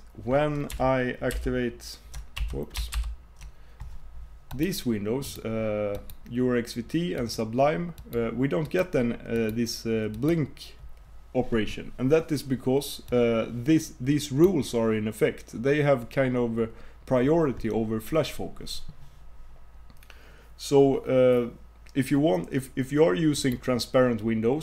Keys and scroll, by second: 1.4 super+o, 3.0 super+p.